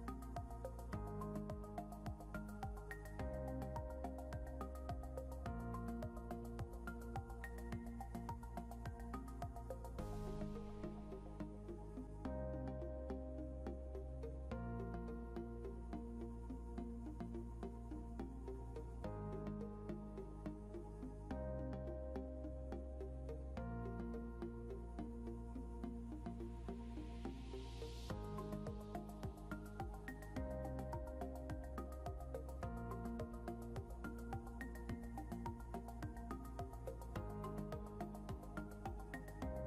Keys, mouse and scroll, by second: 3.2 scroll up 1, 4.2 double click, 5.7 scroll up 1, 11.8 scroll up 1, 12.7 double click, 14.4 scroll down 1, 17.6 scroll up 1, 18.0 scroll down 1, 20.0 scroll up 1, 31.5 double click, 38.2 Insert.